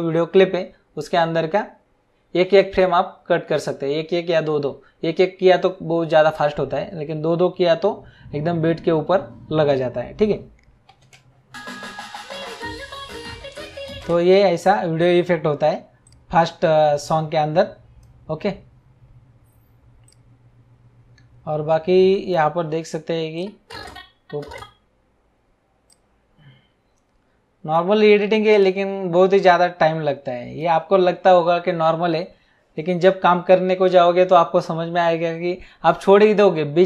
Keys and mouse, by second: 11.0 space, 14.0 space, 16.0 click, 20.1 click, 23.3 click, 25.9 click, 28.5 click.